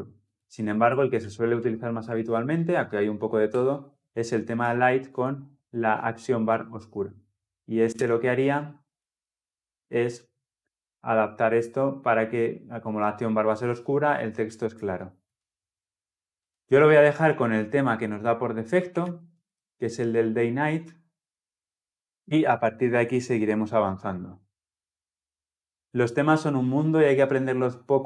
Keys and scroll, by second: 3.4 Return, 5.2 Return, 7.9 ctrl+F10, 17.2 ctrl+z, 17.7 ctrl+z, 18.6 ctrl+shift+z, 20.6 ctrl+z, 21.9 shift+F10.